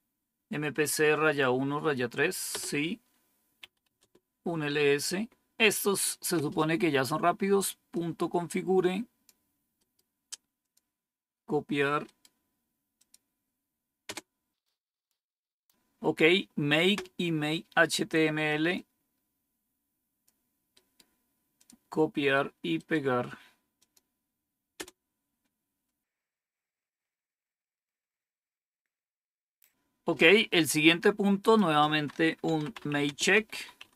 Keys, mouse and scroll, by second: 2.4 Return, 3.5-4.6 typing, 7.8-9.2 drag, 9.7 right click, 10.6 click, 12.0 right click, 12.9 click, 14.1 Return, 18.7-20.2 drag, 20.7 right click, 21.5 click, 22.7 right click, 23.7 click, 25.0 Return, 31.3 click, 32.2-33.9 typing.